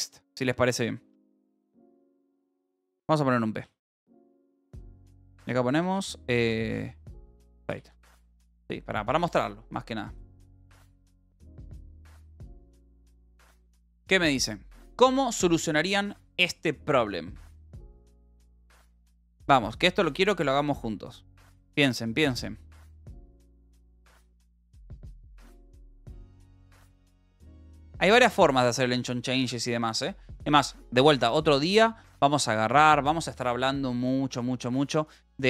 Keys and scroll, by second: 1.6 BackSpace, 2.8 BackSpace, 3.6 p, 4.4 Return, 6.5-8.1 typing, 8.5 ctrl+s, 12.3 ctrl+r, 18.7-19.9 typing, 20.8 Up, 21.4 Down, 21.8 Return, 22.4 j, 22.8 k, 23.6 ctrl+s, 25.1-28.5 typing.